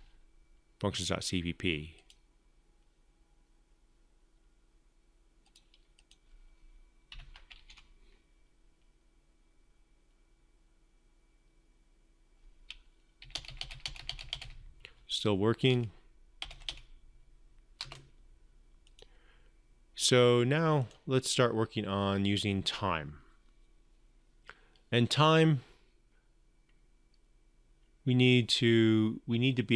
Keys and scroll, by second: 6.9 ctrl+F5.